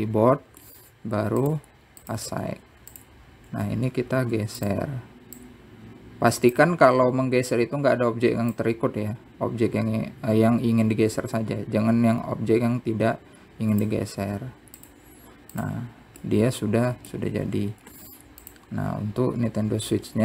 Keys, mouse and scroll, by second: 0.3 scroll up 1, 0.4 middle click, 2.7 t, 3.3 t, 4.7 Tab, 5.1-5.5 scroll down 1, 5.5 z, 6.6 click, 9.7 click, 15.1 z, 16.8 click, 17.4-19.1 middle drag, 20.1-20.2 scroll down 1.